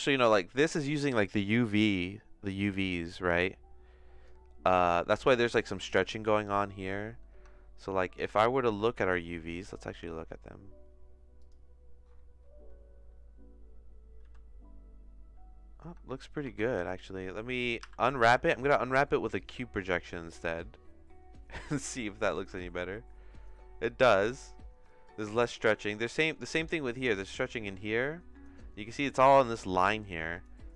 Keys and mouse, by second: 1.2 middle click, 3.0-5.4 drag, 5.7 click, 7.3 Tab, 8.3 a, 9.6-11.6 drag, 14.2 a, 15.8 Tab, 16.4 Tab, 16.7 a, 17.8 u, 22.5 Tab, 25.8 click, 26.6 Tab, 27.4 a.